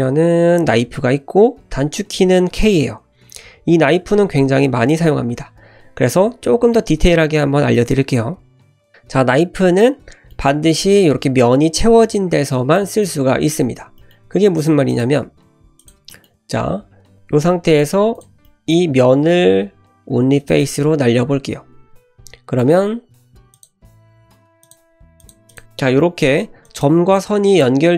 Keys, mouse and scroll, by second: 8.4 scroll up 1, 9.2-9.8 scroll down 1, 9.8-10.3 middle drag, 12.8 middle click, 13.2 Tab, 13.5 `, 14.0 shift+middle drag, 14.3 shift+a, 15.3 g, 16.1 shift+middle click, 16.5 Tab, 16.9 Tab, 17.1 Tab, 17.1 1, 17.7 click, 17.9 3, 18.2 click, 18.5 middle drag, 19.0 x, 21.2 1, 22.3 scroll up 1, 22.6 shift+middle click, 23.5-25.3 drag, 25.5 click, 26.6 click, 27.2 click.